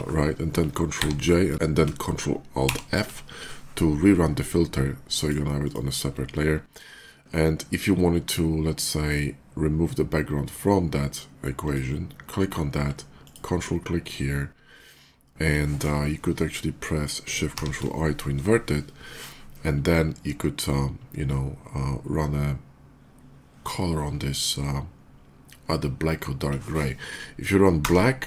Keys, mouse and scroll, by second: 0.8 ctrl+j, 4.8 ctrl+alt+click, 5.5 ctrl+alt+click, 11.4 click, 13.1 ctrl+click, 27.6 alt+Delete.